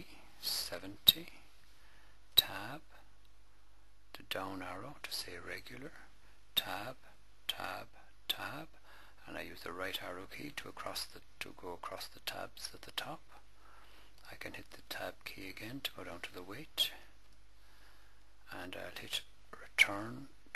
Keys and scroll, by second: 0.5 7, 1.1 0, 2.1 Tab, 4.2 Down, 6.2 Down, 9.5 Right, 12.0 Left, 14.5 Tab, 16.7 8, 17.0 7, 19.7 Return.